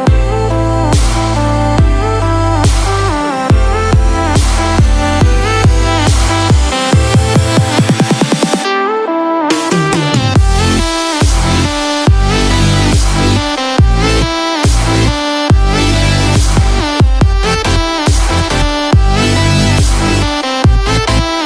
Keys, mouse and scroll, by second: 0.1-0.7 scroll up 3, 0.6 shift+middle click, 1.1 middle click, 1.5 click, 2.2-2.6 scroll down 1, 2.6 shift+middle click, 4.9 click, 12.9 shift+click, 14.8 ctrl+j, 16.1 click, 16.4 click.